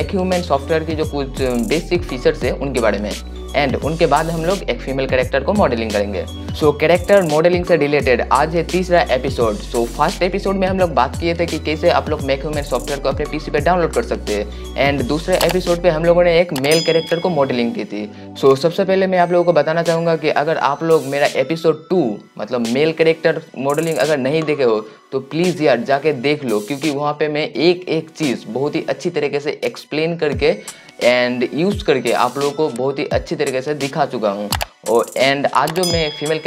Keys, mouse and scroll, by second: 8.1 click.